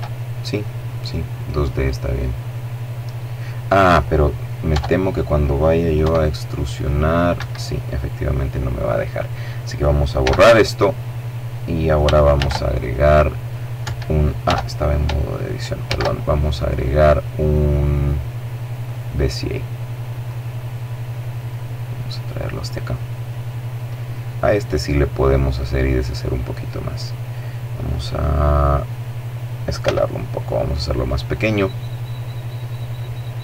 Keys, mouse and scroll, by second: 0.7-1.1 scroll down 2, 1.1 middle click, 3.7 Tab, 5.0 e, 6.3 Escape, 9.2 x, 9.4 click, 11.4 shift+a, 12.8 Escape, 14.8 shift+a, 17.8 click, 19.2-20.9 drag, 21.3-22.9 drag, 25.1 click, 28.8 s, 30.2 click, 31.9-33.4 drag.